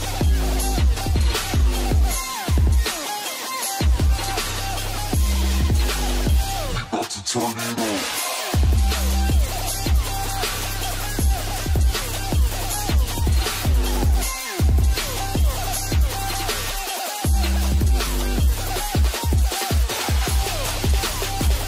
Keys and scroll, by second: 1.3 ctrl+space, 11.2 |, 16.9 |.